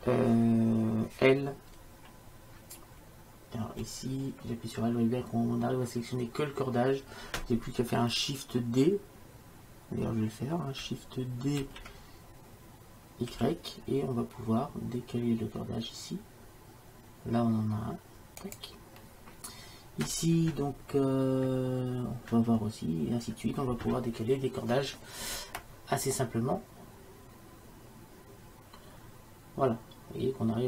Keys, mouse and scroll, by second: 3.0 l, 4.1 l, 12.1 shift+d, 26.4-28.2 middle drag.